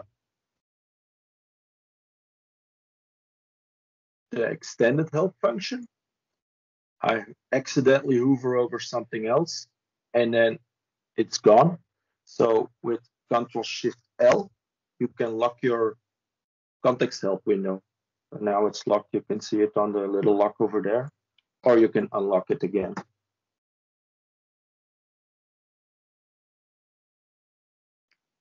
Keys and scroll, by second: 13.7 ctrl+shift+l, 21.4 ctrl+shift+l.